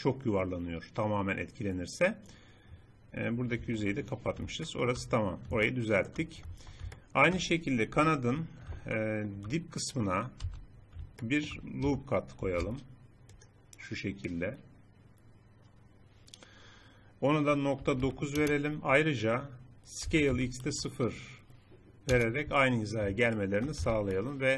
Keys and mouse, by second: 1.7 middle click, 3.7 Tab, 6.6 Tab, 8.0 KP_7, 10.5 z, 12.5 ctrl+r, 20.4 s, 23.9 z.